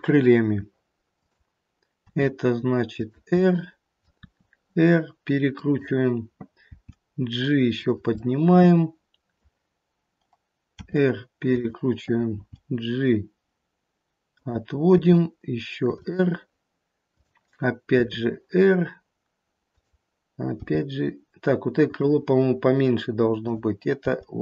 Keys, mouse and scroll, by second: 1.0 g, 1.9 r, 3.3 middle click, 4.1 r, 6.7 g, 8.0 middle click, 10.8 r, 12.4 g, 15.0 r, 17.0 click, 17.9 r, 20.6 g, 23.3 click, 24.1 g.